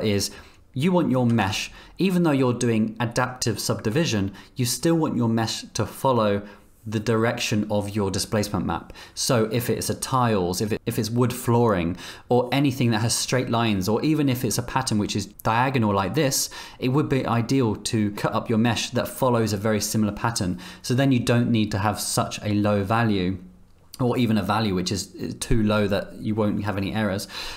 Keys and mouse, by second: 1.4 Tab.